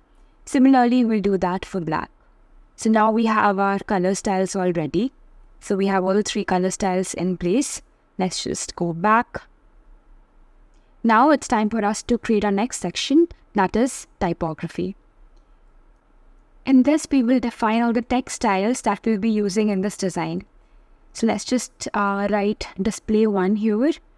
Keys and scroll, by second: 11.9 super+c, 12.1 super+v, 15.1 shift+t.